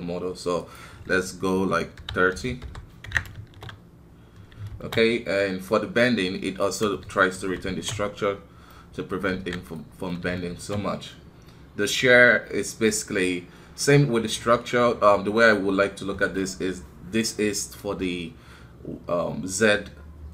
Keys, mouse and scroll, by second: 3.3 shift+space, 4.7 shift+space, 5.9-7.4 drag, 7.4 shift+Left, 7.6 shift+space, 8.7 middle click, 9.4 alt+a, 9.8 middle click, 10.5 shift+space.